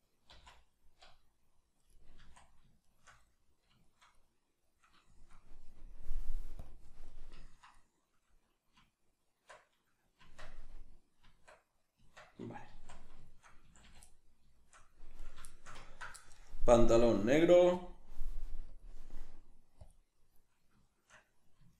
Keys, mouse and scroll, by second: 0.3 c, 2.0 right click, 2.2 z, 2.8 shift+right click, 3.3-6.0 middle drag, 6.0-7.1 drag, 7.1-15.1 middle drag, 8.8 Tab, 12.6 z, 13.6 a, 15.1 right click, 15.5-17.0 shift+middle drag, 17.0-20.8 drag, 20.8-21.7 shift+middle drag.